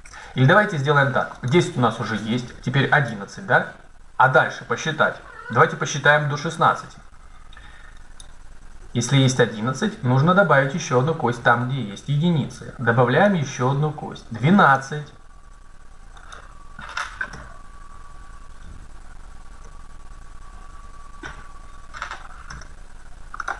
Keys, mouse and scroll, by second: 1.4-3.4 drag, 8.0 middle click, 8.5-9.7 right drag, 13.1-15.0 drag, 16.1 right click, 16.5 right click, 17.1-18.1 right drag, 17.1 Tab, 20.5 BackSpace, 21.0 KP_2, 22.3 Tab.